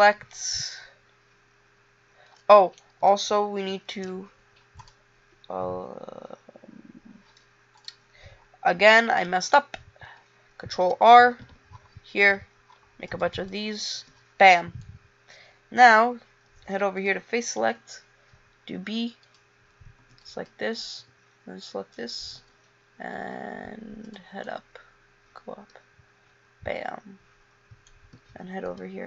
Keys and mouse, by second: 2.8 middle click, 4.1 ctrl+r, 9.4 ctrl+z, 10.9 ctrl+r, 14.1 a, 17.8 b, 20.2 b, 21.2 b, 22.4 e, 28.4 a.